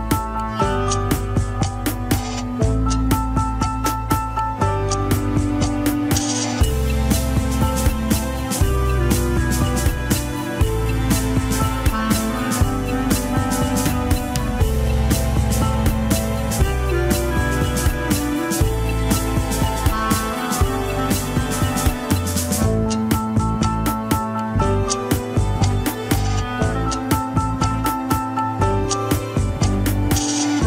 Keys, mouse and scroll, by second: 0.1 Tab, 0.6 click, 1.3 Tab, 2.2 ctrl+click, 2.3 scroll down 1, 2.7 Tab, 3.3 click, 3.9 Tab, 4.0-5.8 middle drag, 5.8 ctrl+click, 6.3 Tab, 6.7 click, 7.4 Tab, 8.4 ctrl+click, 8.9 Tab, 9.5 click, 10.1 Tab, 10.9 ctrl+click, 11.4 Tab, 12.1 click, 12.6 Tab, 12.8-14.1 middle drag, 14.1 ctrl+click, 14.7 Tab, 15.4 click, 16.0 Tab, 16.1-17.8 middle drag, 17.8 ctrl+click, 18.8 Tab, 20.2 Tab, 21.0 ctrl+click, 21.6 Tab, 22.6 click, 23.1 click, 23.9 Tab, 25.0 ctrl+click, 25.2 middle click, 25.9 Tab, 26.7 click, 27.3 Tab, 28.2 ctrl+click, 29.1 Tab, 29.9 click, 30.6 Tab.